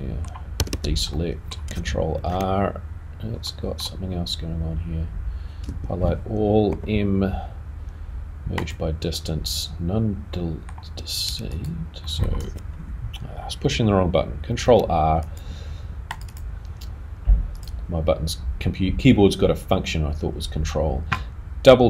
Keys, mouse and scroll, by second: 1.1 middle click, 1.1 a, 2.1 r, 3.4 middle click, 12.0 middle click, 12.0 click, 14.5 ctrl+r, 17.6 click, 21.1 right click.